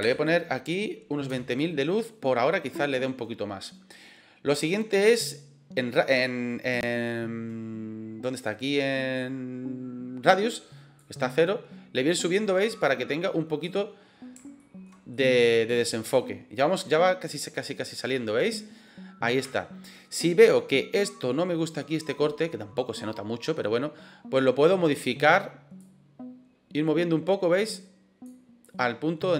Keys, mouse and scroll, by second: 10.9-13.5 drag, 14.4 shift+middle drag, 15.0-15.5 middle drag, 17.1-18.4 drag, 19.4-20.0 shift+middle drag, 25.8-28.2 drag, 29.0-29.3 drag.